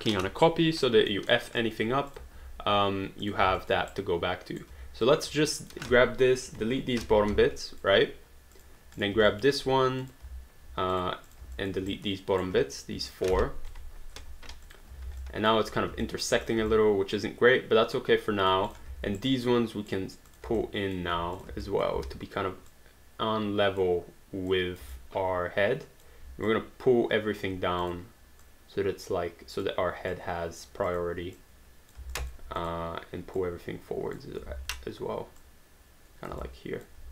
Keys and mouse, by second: 1.1 alt+middle click, 1.6 alt+click, 2.1 click, 3.2 click, 3.6 alt+click, 3.9 right click, 4.7 q, 5.1 click, 5.6 shift+click, 6.5 Delete, 7.3 alt+d, 7.6 alt+click, 8.6 click, 9.3 alt+click, 10.0 click, 10.9 click, 11.6 alt+click, 11.9 right click, 12.5 q, 12.7 click, 13.1 shift+click, 13.7 Delete, 14.6 click, 15.1 alt+d, 15.2 alt+click, 16.1 alt+click, 16.7 alt+click, 18.7 click, 19.2 right click, 20.3 click, 20.6 alt+click, 21.4 shift+click, 21.7 alt+click, 22.0 w, 22.7 click, 24.5 click, 24.9 alt+click, 26.5 click, 27.8 click, 30.1 click, 32.1 alt+click, 32.6 click, 34.5 ctrl+z, 35.4 click, 36.4 alt+click.